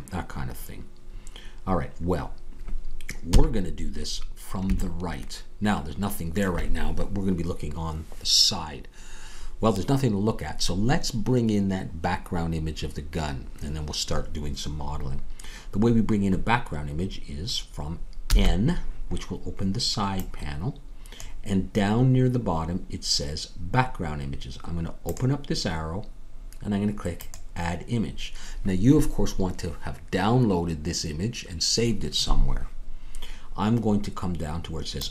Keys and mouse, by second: 3.3 KP_3, 18.2 n, 21.8-23.3 drag, 28.6-35.1 drag.